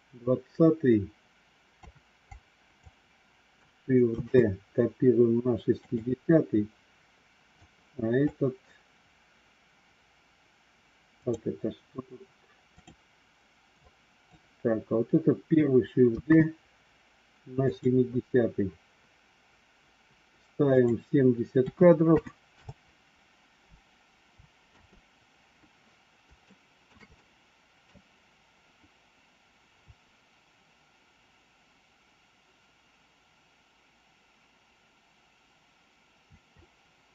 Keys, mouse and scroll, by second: 2.1 click, 4.1 shift+d, 7.5 click, 11.0 click, 12.6 click, 13.7 click, 16.1 shift+d, 20.6 click, 24.5 space, 26.4 shift+middle click, 27.1 middle click.